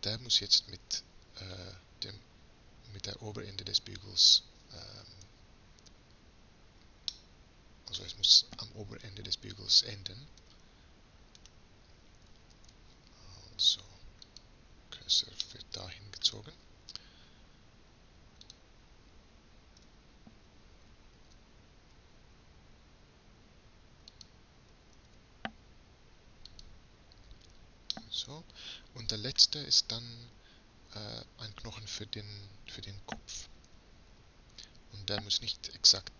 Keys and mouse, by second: 7.1-8.7 middle drag, 10.4 Tab, 12.6 shift+s, 15.4-17.3 drag, 17.3 middle click, 18.5-21.3 drag, 19.8 Tab, 21.3 e, 24.9 shift+s, 27.4-30.0 drag, 30.0-32.1 middle drag, 33.7 e.